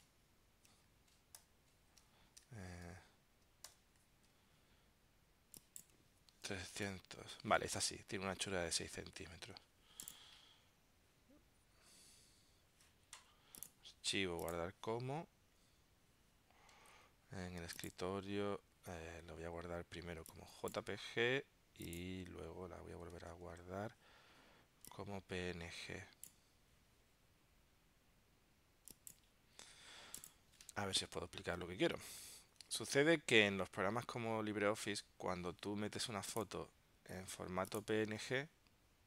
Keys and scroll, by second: 1.5 ctrl+alt+super+i, 3.8 alt+super+i, 23.4 shift+super+s, 31.5 super+w, 32.0 super+q, 33.0 super+Tab.